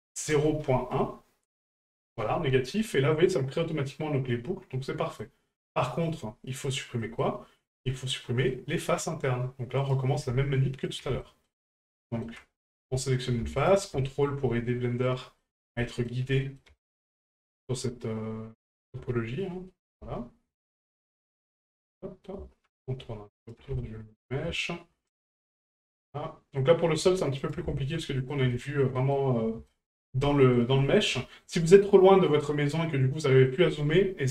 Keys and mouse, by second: 2.7 middle click, 4.0-5.2 middle drag, 6.6 click, 7.0 middle click, 7.8 shift+middle click, 8.5 middle click, 9.8 right click, 10.9 ctrl+right click, 11.2 shift+middle click, 11.6 middle click, 12.0 shift+middle click, 13.6 ctrl+right click, 14.0 middle click, 15.0 ctrl+right click, 15.4 middle click, 15.8 shift+middle click, 16.3 middle click, 16.8 shift+middle drag, 17.2 middle drag, 17.6 shift+middle drag, 18.7 shift+right click, 19.7 middle drag, 20.7 shift+right click, 21.1-21.6 middle drag, 21.9-22.3 middle drag, 23.4 ctrl+right click, 23.8-24.2 shift+middle drag, 25.1 ctrl+right click, 25.4-25.8 middle drag, 26.5 middle click, 27.4 ctrl+right click, 27.7 shift+middle drag, 28.1 middle drag, 28.5 shift+middle drag, 29.0 middle drag, 29.7-30.0 shift+middle drag, 30.5 ctrl+right click, 30.8 middle drag, 31.2 shift+middle drag, 33.1-33.4 middle drag.